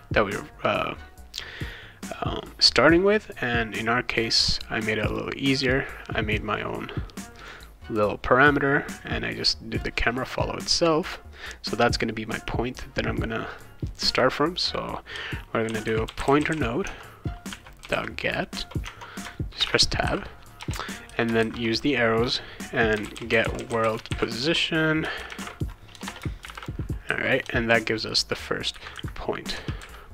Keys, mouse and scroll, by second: 2.0 click, 4.1 click, 5.1 click, 5.6 click, 9.7 click, 13.5 click, 15.4-21.4 typing, 18.9 Tab, 22.7-27.4 typing.